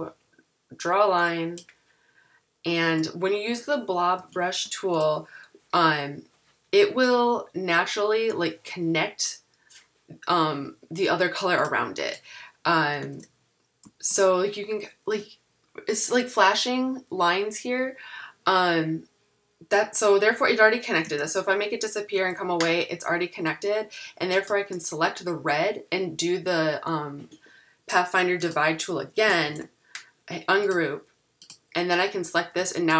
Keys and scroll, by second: 2.9 v, 13.1 super+3, 14.1 super+z, 21.3 super+3, 22.4 super+z, 29.5 shift+super+g.